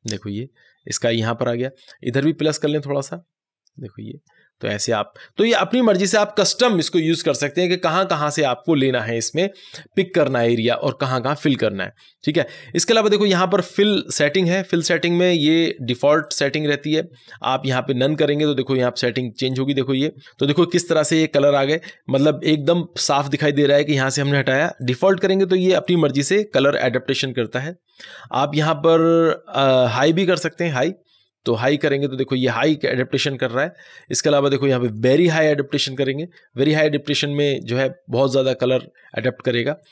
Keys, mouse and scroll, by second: 2.4-14.6 drag, 14.6-15.3 scroll down 1, 16.1 click, 24.7 click, 28.9 click, 33.9 click, 39.7 click, 39.7 click.